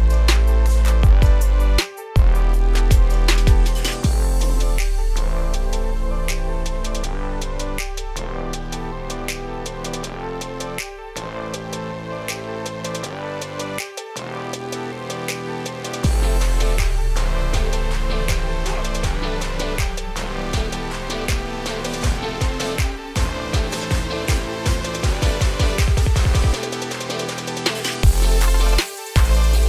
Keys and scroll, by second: 26.4 ctrl+j.